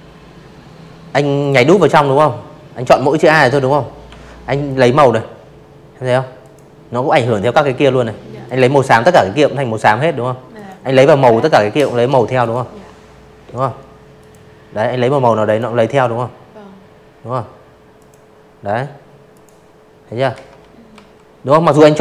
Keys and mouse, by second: 1.0 i, 1.6 click, 3.3 click, 4.3 click, 5.4 click, 7.5 click, 9.3 click, 11.1 click, 12.3 click, 14.9 click, 16.2 click, 17.2 ctrl+z, 17.8 v.